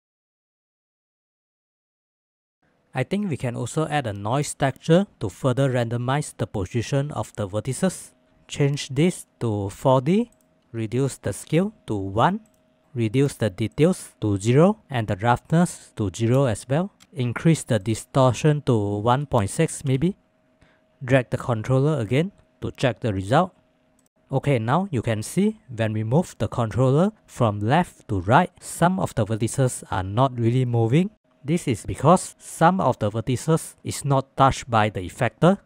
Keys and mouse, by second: 8.0 click, 31.4-35.6 middle drag.